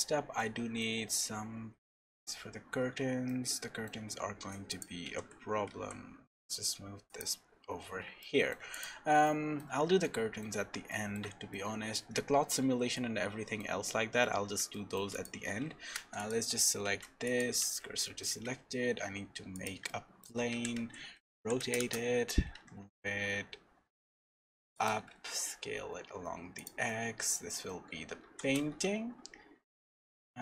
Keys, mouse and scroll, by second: 0.4 shift+middle click, 2.9-3.3 scroll up 2, 3.3 shift+middle click, 3.9 shift+scroll down 1, 4.1 scroll up 2, 4.7 click, 5.1 g, 7.4-8.0 scroll down 4, 8.2 shift+middle click, 8.7 click, 9.2 shift+middle click, 11.5 middle click, 12.9 shift+middle click, 13.8 scroll up 1, 14.7 shift+middle click, 15.1 click, 15.5 Tab, 16.0 3, 16.2 click, 16.8 shift+s, 17.6 Tab, 18.0 middle click, 18.3 shift+a, 19.9 shift+middle click, 20.5 r, 22.5 g, 25.0 s, 26.9 middle click, 27.7-29.6 scroll up 4, 28.2 g.